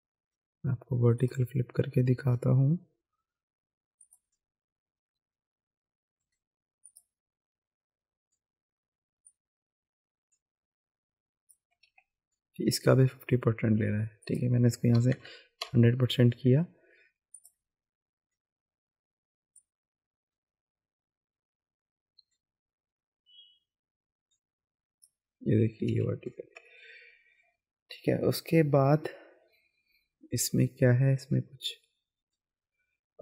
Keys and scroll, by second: 11.9 ctrl+z, 12.6 ctrl+alt+z, 14.9 KP_1, 15.1 KP_0, 15.6 Return, 25.9 ctrl+z.